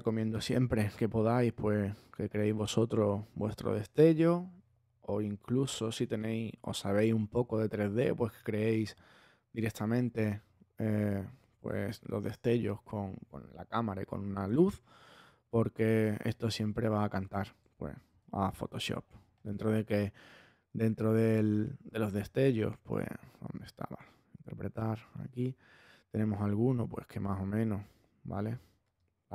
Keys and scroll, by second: 17.9 super+z.